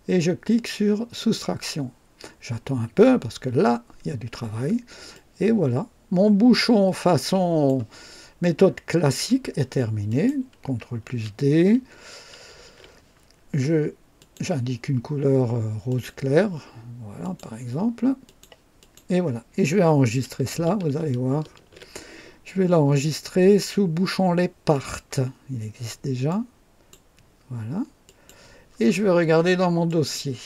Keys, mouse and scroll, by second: 1.1 click, 5.1-7.8 drag, 8.3-9.3 drag, 10.0 click, 12.4 ctrl+d, 14.1 click, 15.8 click, 17.2 click, 18.2 click, 18.7 click, 21.4 ctrl+s, 24.6 click, 26.2 click, 28.0 click, 29.8 click.